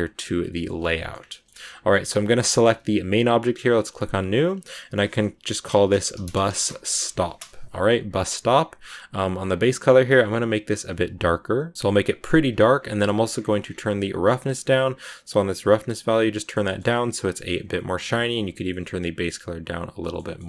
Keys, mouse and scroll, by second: 0.0 click, 0.4 shift+middle click, 1.1 scroll down 1, 1.2-2.2 shift+middle drag, 2.2 right click, 2.7 g, 3.9-7.3 drag, 9.4-11.7 drag, 12.9-14.3 scroll up 1, 14.3-15.0 scroll up 1, 15.0-16.2 drag, 16.2 middle click, 16.8 scroll up 1, 16.8-19.2 middle drag, 19.2 click, 19.9 shift+middle click, 20.3 scroll down 1.